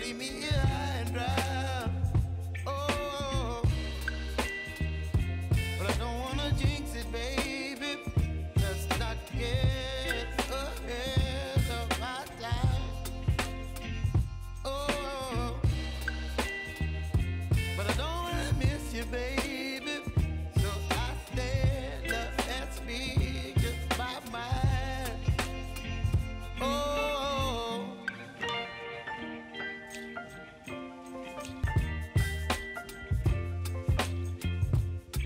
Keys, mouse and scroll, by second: 0.6 click, 2.2 [, 3.2 click, 4.2 [, 5.0 click, 6.4 [, 6.8 click, 7.7 space, 9.2 click, 9.5 space, 11.9 space, 12.8 click, 14.7 [, 15.2 p, 16.3-18.5 drag, 18.9 j, 20.2 click, 20.3 j, 22.8-25.3 drag, 25.8 F9, 26.7-30.0 drag, 30.0 space.